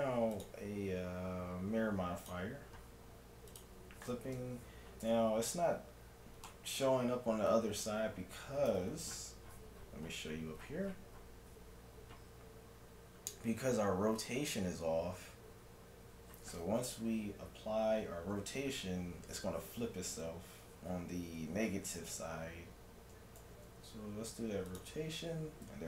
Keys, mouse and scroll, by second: 3.5-5.2 drag, 5.0 Tab, 6.5 middle click, 8.7 n, 9.5-23.4 middle drag, 23.4 ctrl+a.